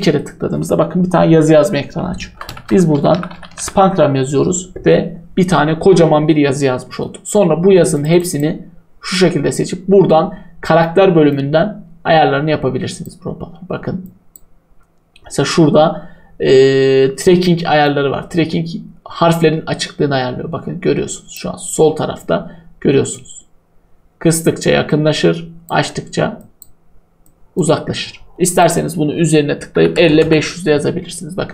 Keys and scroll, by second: 2.1-3.1 typing, 29.5-30.6 typing.